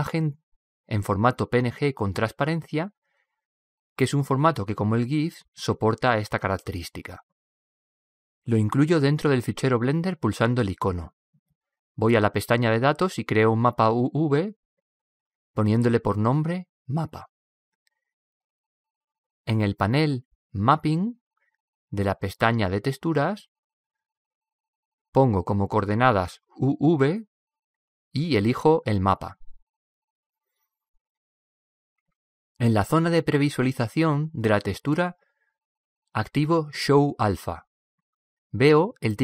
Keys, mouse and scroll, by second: 0.5-2.4 drag, 9.1 click, 33.5-35.4 drag, 37.7-39.2 drag.